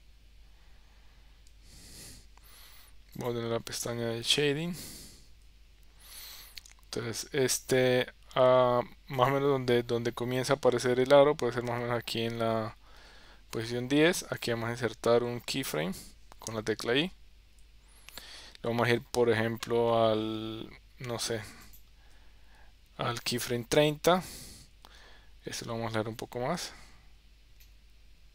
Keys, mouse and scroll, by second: 1.0 Tab.